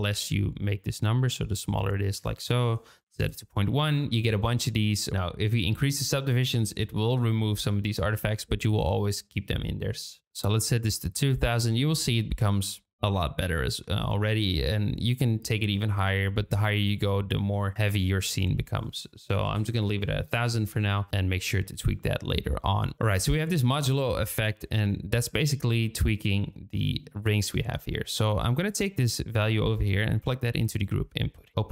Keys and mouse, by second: 2.6 click, 2.9 KP_Decimal, 3.0 KP_1, 3.2 KP_Enter, 4.1-9.7 drag, 10.1 click, 10.3 n, 10.3 KP_0, 18.9-20.9 drag, 19.7 KP_0, 21.1-22.1 shift+middle drag, 27.7 shift+middle click, 28.7-31.0 drag, 31.5 n.